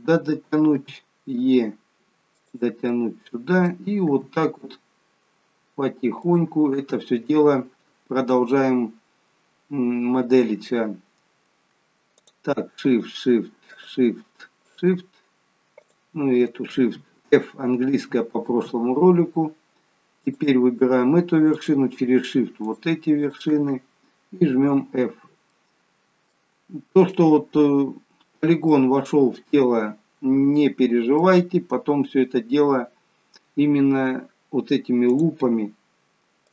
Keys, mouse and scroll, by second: 2.9 middle click, 4.1 e, 12.2 click, 13.0 shift+click, 18.0 f, 20.3 click, 21.6 shift+click, 23.3 shift+click, 24.7 f, 25.5 middle click, 28.0-28.6 scroll up 1, 28.8 middle click, 32.2-34.0 scroll down 1, 35.2 click.